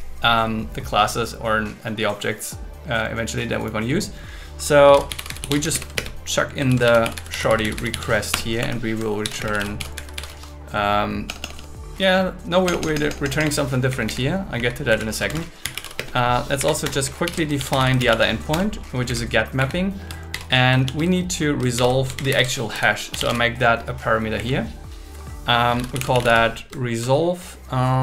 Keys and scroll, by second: 5.7-9.5 typing, 8.3 Return, 8.6 Right, 11.3 BackSpace, 12.7 BackSpace, 13.9 Down, 14.4 Down, 15.2 Return, 16.0 space, 16.6 Up, 16.8 Return, 17.2 alt+l, 17.6 shift+g, 18.0 shift+m, 18.5 Return, 19.0 Down, 19.6 Up, 20.3 shift+8, 20.8 shift+2, 21.8 shift+7, 22.2 alt+8, 22.7 Left, 24.4 Down.